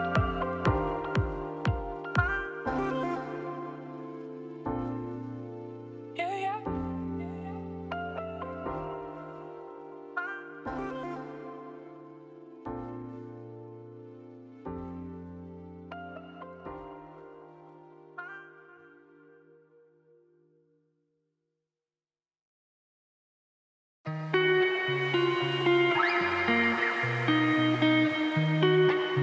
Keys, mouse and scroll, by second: 0.4-2.3 drag, 6.8 click, 7.6 click, 8.8 click, 10.1-13.3 drag, 13.3-13.7 scroll down 1, 16.9 shift+middle click, 17.6-18.9 scroll up 1, 18.9 click, 19.4 scroll down 2, 19.5 middle click, 20.5 click, 23.6 scroll up 1, 25.0 click.